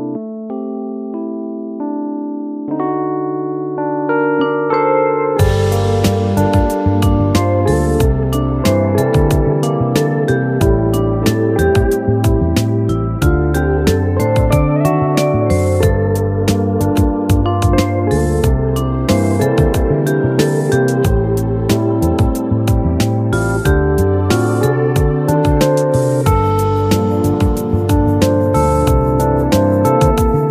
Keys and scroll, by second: 7.6 ctrl+k, 14.7 ctrl+z.